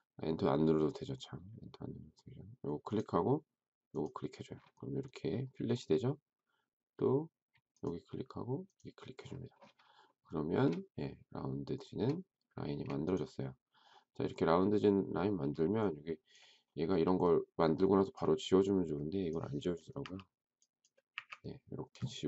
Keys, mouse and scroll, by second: 10.0 shift+middle click, 12.6 space, 20.0 Delete, 21.1 Delete.